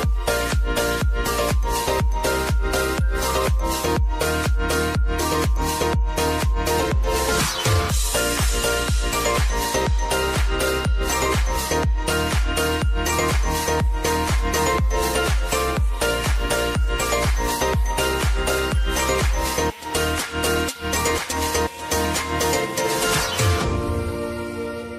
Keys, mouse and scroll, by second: 8.7-19.7 drag, 23.3-24.9 drag.